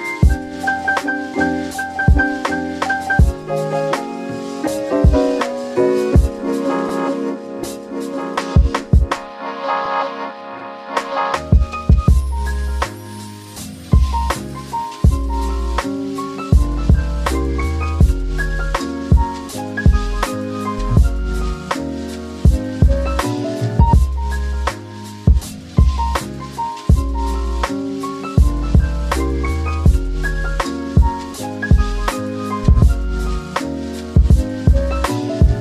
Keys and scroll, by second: 0.4 q, 5.4-9.6 typing, 11.7 typing, 13.6-16.0 typing, 18.6 Escape, 29.8 m, 33.8 space, 35.3 m.